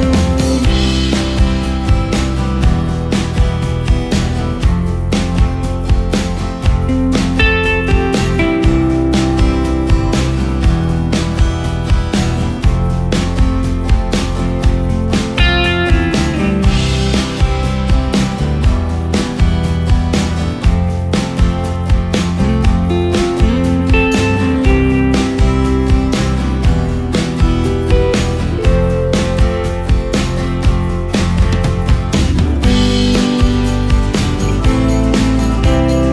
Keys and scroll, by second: 3.1 space, 5.8 ctrl+space, 21.9 ctrl+g, 28.6 ctrl+space, 33.2 space.